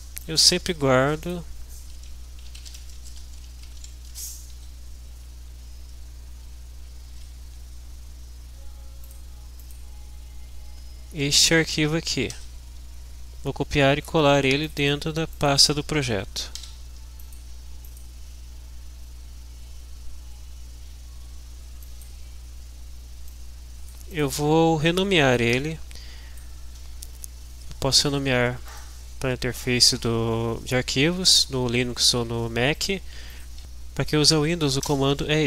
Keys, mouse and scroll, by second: 0.2 click, 1.2 click, 2.2-4.3 typing, 4.8 Down, 6.6 Up, 7.1 Right, 9.0 drag, 9.8 click, 12.9 ctrl+c, 14.6 click, 15.3 click, 16.7 ctrl+v, 17.2 ctrl+click, 22.0 click, 23.3 click, 25.5-26.6 drag, 28.9 click, 32.9 click.